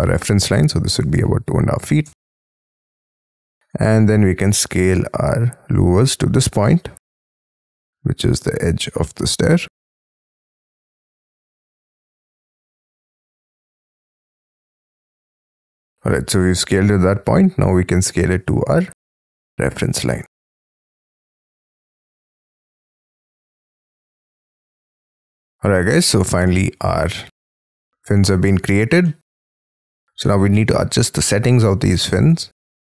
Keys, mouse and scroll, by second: 0.6-1.8 typing, 2.0 Return, 2.6-3.1 scroll down 13, 3.3 space, 3.5 middle click, 3.9 space, 4.1 middle click, 4.1 s, 5.6 scroll up 1, 5.8 scroll down 1, 5.9-8.1 scroll up 21, 8.1 scroll up 5, 13.6 middle click, 14.1-15.7 scroll down 38, 15.7 middle click, 16.1-16.5 scroll down 6, 16.5 scroll up 6, 24.9 middle click, 25.5-26.1 scroll down 11, 26.3-26.9 scroll up 10, 26.9 space, 27.1 Escape, 27.4-28.0 scroll up 14, 29.0 middle click, 29.6-30.2 scroll up 15, 30.2 middle click.